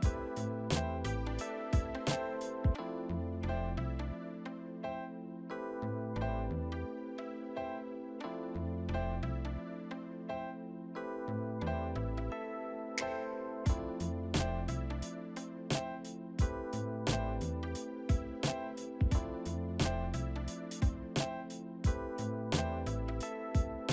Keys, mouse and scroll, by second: 1.5 middle click, 2.1 alt+middle click, 3.0 ctrl+c, 6.4 right click, 8.6-9.5 typing, 11.2 right click, 13.7 middle click, 17.2-18.4 typing, 19.6 middle click.